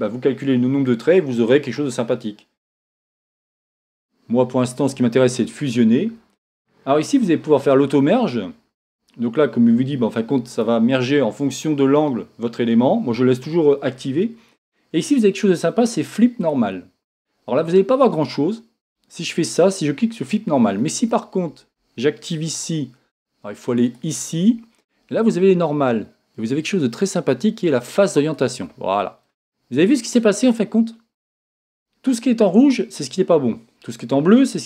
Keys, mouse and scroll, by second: 16.5-18.2 drag, 18.2-28.3 middle drag, 28.3 click, 29.3-34.6 middle drag, 31.2-34.6 scroll up 2.